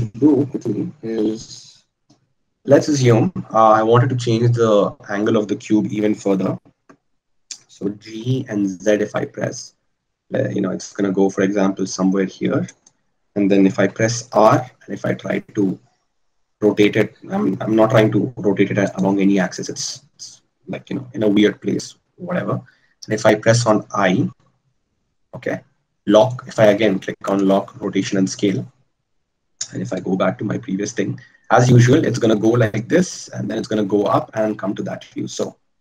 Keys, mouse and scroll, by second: 1.1-13.1 drag, 20.5-28.5 drag.